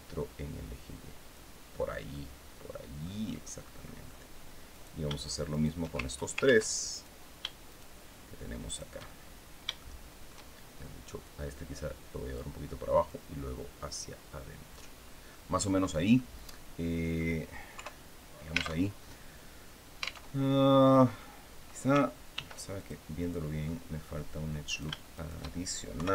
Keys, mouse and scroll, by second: 1.8-2.9 middle drag, 3.3 middle click, 4.4 right click, 5.2 shift+right click, 6.1 ctrl+z, 6.6 ctrl+right click, 7.4 shift+right click, 8.3 shift+right click, 8.8-10.1 shift+middle drag, 10.9-12.2 drag, 12.8-14.6 drag, 14.7 scroll down 2, 15.0 middle click, 15.9-17.0 middle drag, 17.4 KP_3, 18.5 alt+Tab, 20.0 alt+Tab, 22.0 ctrl+r, 22.4 ctrl+click, 22.9 ctrl+click, 23.3 ctrl+middle click, 24.3 shift+right click, 24.8 shift+right click, 25.6 KP_3.